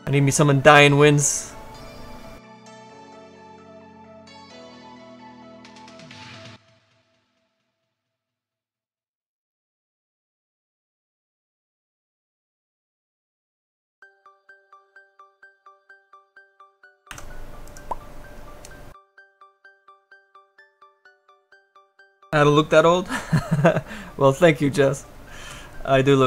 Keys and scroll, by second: 8.2 s.